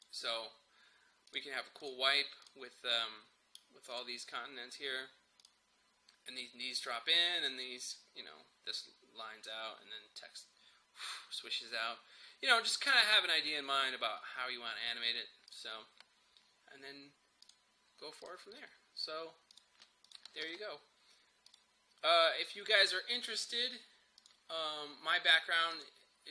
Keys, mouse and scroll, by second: 0.0 click, 15.6 click, 20.5 ctrl+s, 21.5 click.